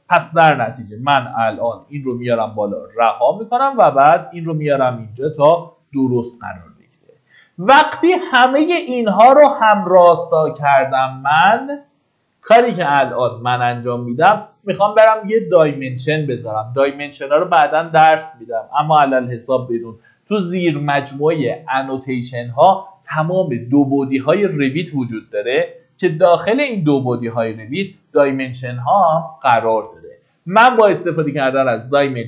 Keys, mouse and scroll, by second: 0.2-0.7 scroll up 1, 0.7-4.7 drag, 5.2-5.9 scroll down 1, 7.6-8.7 middle drag, 12.7 Escape, 15.0 scroll up 1, 23.9 click.